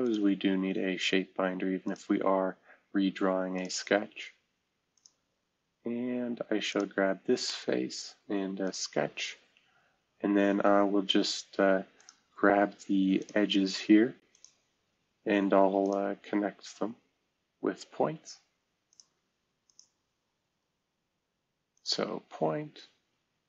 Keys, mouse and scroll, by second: 0.0 click, 1.8 click, 3.5 click, 3.9 space, 4.9-6.5 drag, 6.6-8.2 drag, 8.6 click, 9.7-10.5 scroll up 2, 11.9 click, 13.1 click, 14.3 click, 15.8 click, 18.9 click, 19.6 click, 20.3-21.1 scroll up 2.